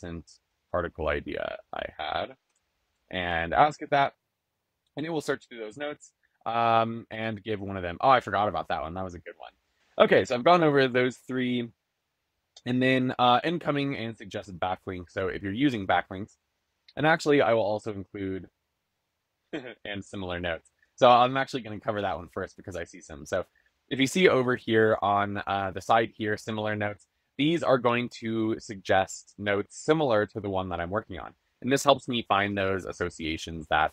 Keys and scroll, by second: 1.7 shift+\, 2.3 shift+/.